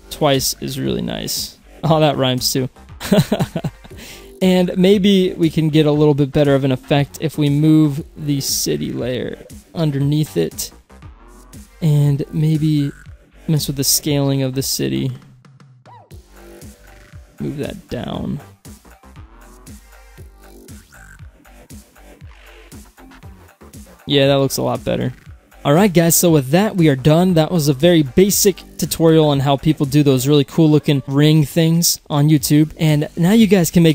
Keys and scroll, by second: 0.0 ctrl+z, 13.8 s.